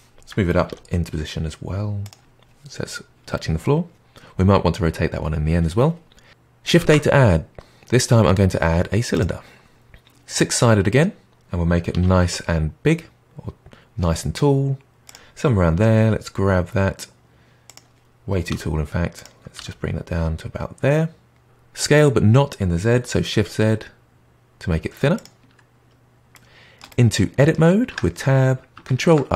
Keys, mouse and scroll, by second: 0.6 g, 6.7 shift+a, 11.9 s, 15.7 g, 18.5 s, 19.5 g, 21.4 s, 25.8-26.8 scroll up 2, 26.8-27.9 middle drag, 27.9 Tab, 28.9 ctrl+r.